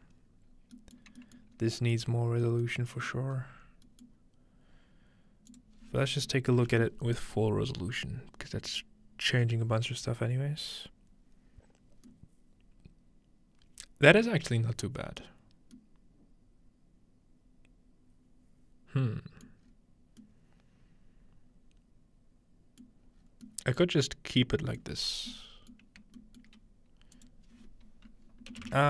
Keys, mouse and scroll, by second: 0.2 middle click, 0.5-1.6 scroll down 3, 1.0 middle click, 1.4-1.8 middle drag, 1.6-1.9 scroll up 4, 2.1 middle click, 2.1 scroll down 2, 2.7-3.9 middle drag, 2.9-3.5 scroll up 4, 3.9-4.8 scroll up 2, 4.1-5.7 middle drag, 4.8-5.5 scroll up 1, 5.5-7.5 drag, 12.1-13.3 middle drag, 15.3-15.8 scroll down 2, 19.6-20.9 scroll up 2, 20.9-22.8 scroll up 1, 23.2-24.0 scroll down 2, 24.0-25.3 scroll up 2, 26.0 shift+middle click, 26.5-28.5 shift+middle drag, 27.2-28.5 shift+drag.